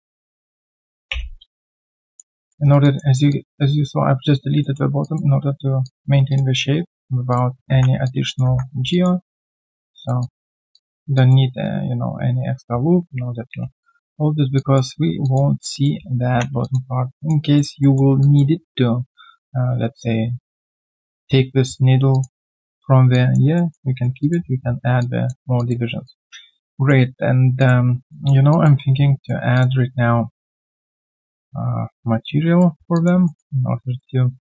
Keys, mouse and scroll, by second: 2.0 alt+click, 2.4 alt+middle click, 2.6 alt+right click, 2.8 alt+click, 4.6 alt+middle click, 5.0 alt+click, 5.8 alt+click, 6.7 right click, 8.0 alt+click, 8.4 ctrl+1, 9.2 right click, 10.2 double click, 10.7 alt+click, 14.6 alt+click, 15.2 alt+click, 15.6 alt+right click, 15.9 scroll down 1, 16.6 alt+click, 16.9 alt+scroll down 1, 17.2 alt+click, 17.4 alt+right click, 17.8 alt+middle click, 18.2 alt+click, 19.2 alt+click, 21.8 alt+scroll down 1, 22.1 alt+click, 22.4 alt+middle click, 23.1 alt+click, 23.5 alt+middle click, 23.9 alt+right click, 24.2 alt+click, 26.0 alt+click, 28.1 alt+middle click, 28.5 alt+click, 30.0 right click, 32.9 alt+click, 33.2 alt+middle click, 33.6 right click.